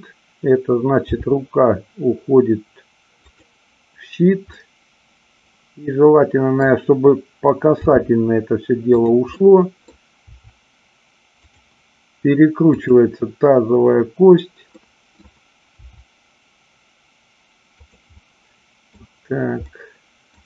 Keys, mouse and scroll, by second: 1.0 g, 3.3 click, 4.5-6.7 middle drag, 7.8 r, 8.9 click, 9.4-10.0 middle drag, 11.5 click, 12.8-14.1 drag, 14.8-15.3 middle drag, 15.9 r, 17.8 click, 18.1 middle click, 19.7 middle click.